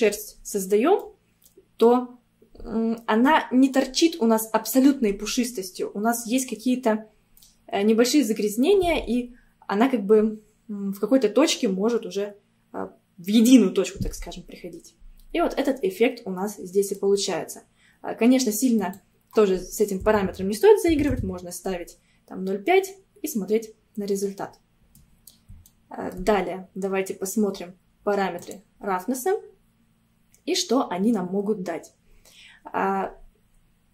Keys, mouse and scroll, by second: 0.1-0.6 scroll up 2, 1.0-2.3 middle drag, 2.3 scroll up 1, 7.4-10.5 middle drag, 15.3-15.7 scroll down 1, 15.7-18.7 middle drag, 18.8-21.8 drag, 22.1-22.7 scroll down 2, 22.7-28.4 middle drag, 28.4 click, 29.0 scroll down 2.